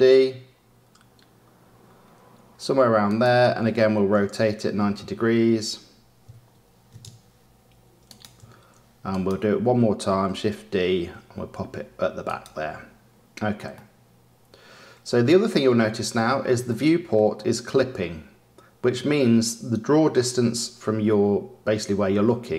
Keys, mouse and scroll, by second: 4.1 r, 9.0 click, 10.3 shift+d, 13.7-18.7 middle drag, 18.9 middle click, 20.0 middle click.